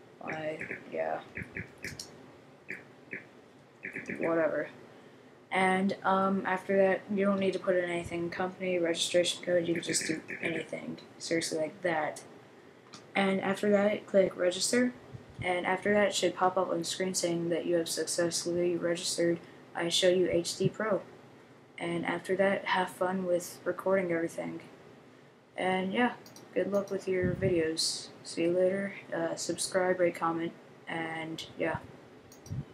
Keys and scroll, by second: 0.0-4.7 typing, 9.4-10.9 typing.